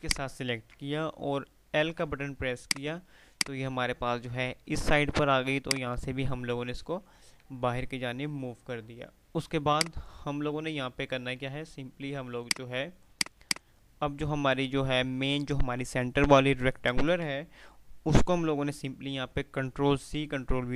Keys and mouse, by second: 0.1 shift+click, 2.0 l, 2.7-7.7 drag, 7.7 F3, 9.6-10.7 F2, 12.6 click.